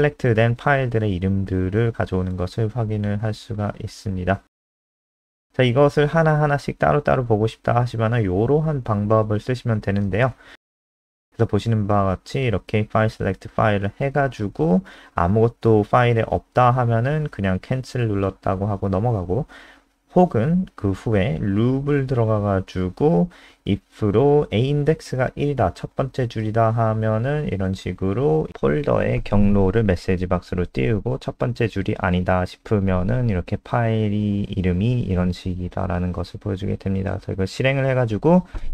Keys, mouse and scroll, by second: 3.3-4.7 scroll down 6, 4.7 click, 5.6 ctrl+c, 5.9 click, 7.6 shift+Home, 7.8 shift+Up, 8.2 ctrl+v, 12.5 click, 35.2 ctrl+s, 35.6 F5, 36.9 click.